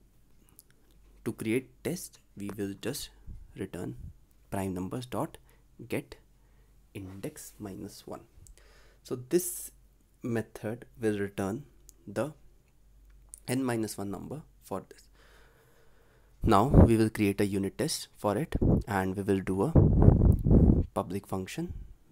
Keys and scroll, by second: 12.0 ctrl+s, 13.2 ctrl+alt+l, 13.6 ctrl+s, 15.8 ctrl+c.